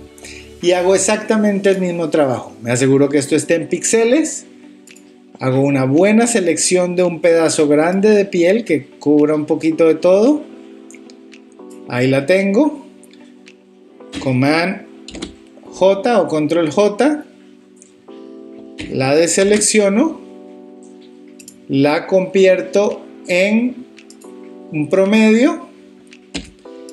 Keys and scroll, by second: 15.1 super+j, 19.4 super+d, 26.4 v.